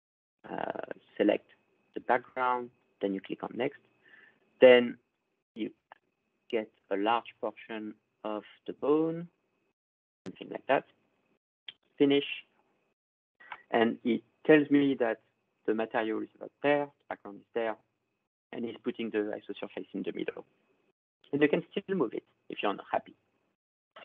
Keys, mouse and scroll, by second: 0.3 click, 2.9 click, 4.4-7.7 drag, 10.3 click, 11.9 click, 15.7-16.9 drag, 23.3-24.0 drag.